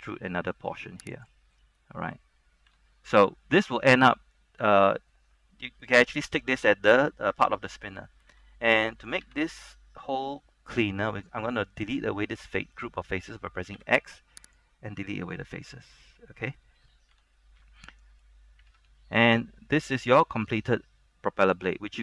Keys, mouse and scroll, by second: 1.3 click, 1.7 scroll up 1, 2.3-2.8 scroll down 1, 2.8 Tab, 3.0 scroll down 1, 3.3-4.8 middle drag, 5.0 scroll up 1, 5.3 middle click, 6.6 scroll down 1, 6.8 middle click, 7.5 scroll up 1, 7.7 middle click, 8.3 ctrl+Tab, 9.0 Tab, 9.5 ctrl+Tab, 13.9 x, 14.6 click, 15.1 middle click, 16.9-17.3 scroll down 1, 17.3 Tab, 17.5-17.9 scroll down 1, 17.9 middle click, 18.8 ctrl+Tab, 19.4 middle click, 20.0-22.0 shift+middle drag.